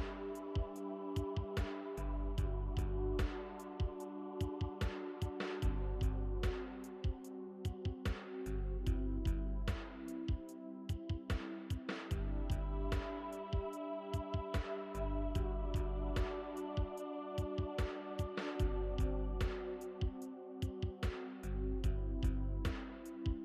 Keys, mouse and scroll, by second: 11.3 ctrl+d, 13.1 v, 13.3 shift+click, 16.1 ctrl+t, 23.0 ctrl+t.